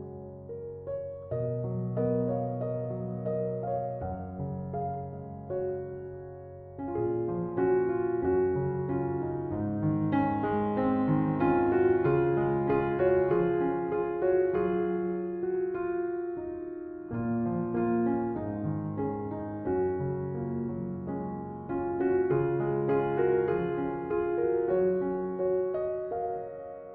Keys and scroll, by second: 17.0 space.